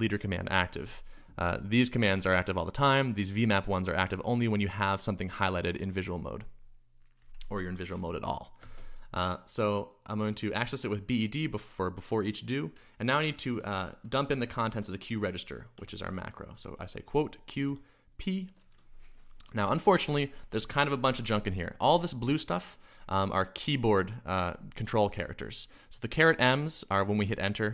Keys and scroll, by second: 8.6 space, 13.5 Escape, 15.7 Escape, 15.8-16.4 typing, 17.4-18.1 typing.